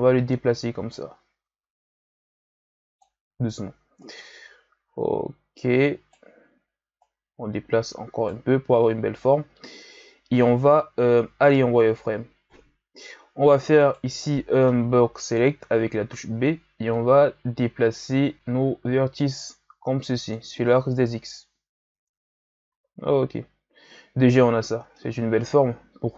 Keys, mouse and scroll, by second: 4.0 right click, 7.0 right click, 11.6 z, 12.8-13.8 ctrl+scroll up 1, 13.8 right click, 14.3 b, 16.9-20.1 drag, 21.4 z, 21.9 Tab, 22.7 a, 23.0-23.8 scroll down 3, 23.8-24.5 scroll up 4, 24.5-24.9 scroll down 1, 24.9-26.1 middle drag.